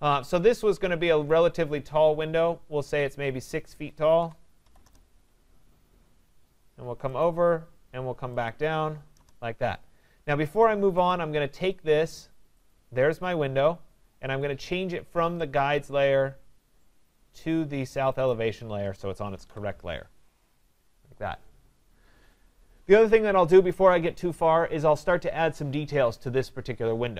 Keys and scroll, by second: 4.8 Return, 19.4 Escape.